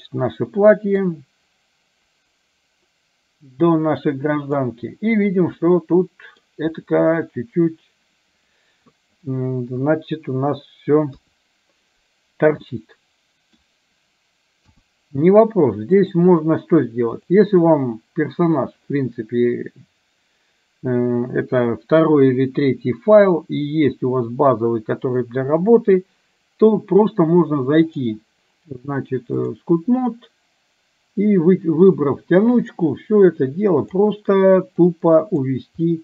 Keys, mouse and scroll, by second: 1.2-4.7 drag, 5.7-6.6 middle drag, 9.8 KP_1, 11.2 KP_3, 12.7-13.7 middle drag, 14.7 KP_1, 16.1 click, 27.9-29.7 drag, 33.3 click, 34.9 click, 35.9 middle click.